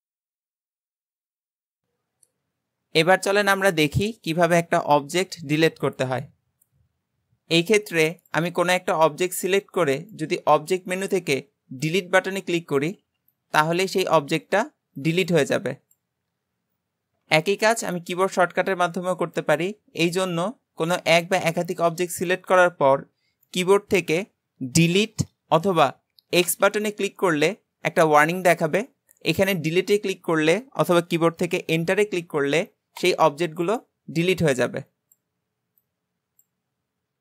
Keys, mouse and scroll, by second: 8.2 click, 10.0-13.0 drag, 20.0 shift+click, 20.9 shift+click, 22.2 shift+click.